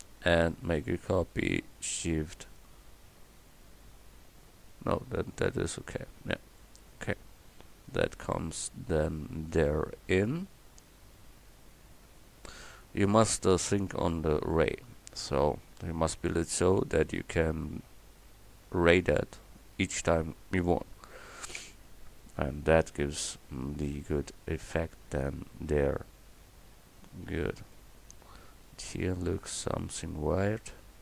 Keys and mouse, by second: 22.9 KP_7, 29.4-30.6 middle drag.